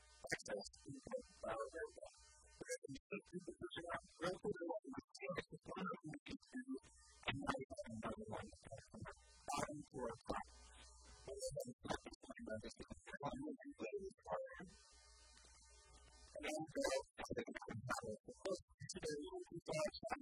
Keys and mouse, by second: 1.7-3.3 drag, 2.9 shift+d, 4.3 r, 7.0-8.9 drag, 10.1 a, 11.2 l, 11.9 middle click, 12.5-14.2 drag, 13.5 KP_3, 14.4-16.0 drag, 15.7 a, 16.2 Tab, 17.7 KP_1, 18.3 Tab, 19.7 b.